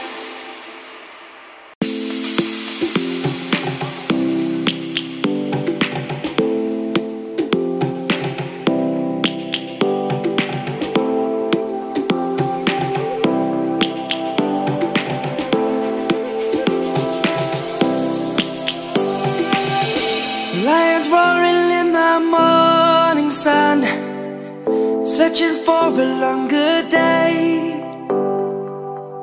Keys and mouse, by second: 0.2 click, 2.0 s, 5.1 click, 6.4 middle click, 8.1 s, 10.6 click, 11.1 middle click, 12.1 3, 13.0 1, 14.9 Menu, 16.0 3, 16.2 3, 20.3 Menu, 23.1 right click, 24.4 middle click, 28.2 click.